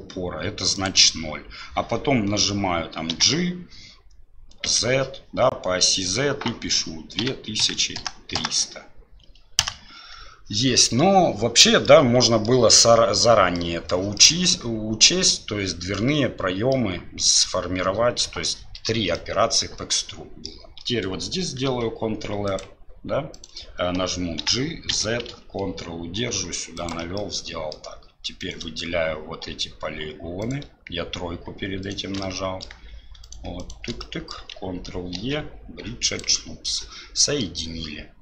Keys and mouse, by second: 11.9 middle click, 13.6 middle click, 14.2 middle click, 16.7 middle click, 19.2-20.5 middle drag, 21.7 ctrl+r, 24.4 g, 27.2 click, 28.4 click, 32.1 typing, 32.2 middle click, 34.0 middle click, 35.1 ctrl+e, 37.2 middle click.